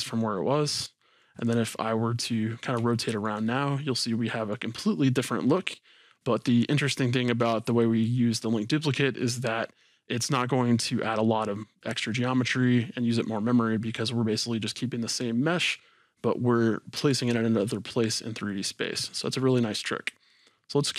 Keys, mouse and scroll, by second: 1.4 click, 1.9-5.1 middle drag, 4.7-5.4 scroll up 2, 6.1-6.6 scroll down 2, 6.9-7.7 shift+middle drag, 20.4 click.